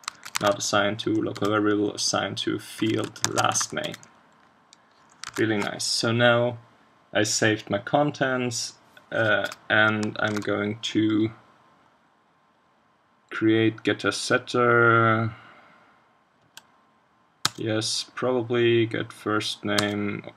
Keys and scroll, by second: 0.1 super+Right, 0.4 super+1, 5.3 super+s, 10.3 super+1.